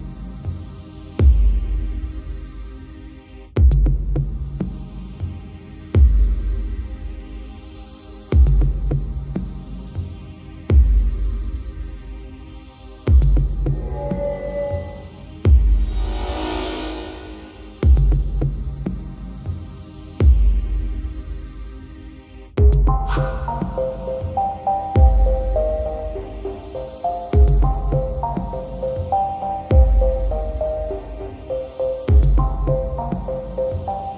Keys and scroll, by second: 3.5 ctrl+i, 12.8 ctrl+0, 19.1 ctrl+i, 19.6 ctrl+=.